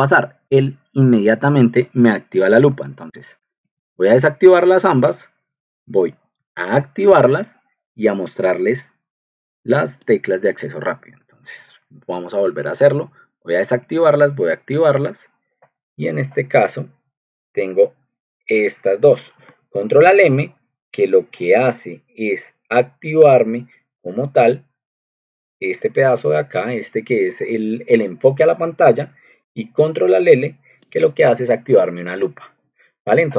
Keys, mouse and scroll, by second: 2.8 ctrl+alt+m, 3.7 ctrl+alt+l, 6.2 ctrl+alt+m, 6.3 ctrl+alt+l, 6.7 ctrl+2, 10.9 Escape, 12.3 ctrl+alt+m, 12.4 ctrl+alt+l, 13.5 ctrl+alt+m, 13.6 ctrl+alt+l, 14.6 ctrl+2, 16.5 ctrl+2, 30.9 click.